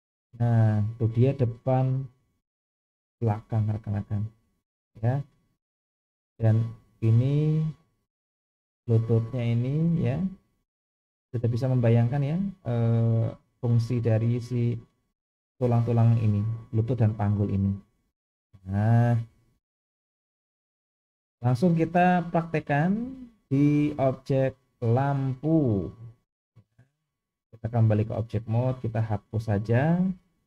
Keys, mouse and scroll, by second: 6.4 click, 6.7 g, 17.9-19.7 middle drag, 20.0-20.7 scroll down 2, 22.3 click, 23.0-23.3 scroll down 1, 24.8-25.4 middle drag, 25.5-26.6 scroll down 2, 27.0-27.7 drag, 28.5-29.1 drag, 30.0 Delete.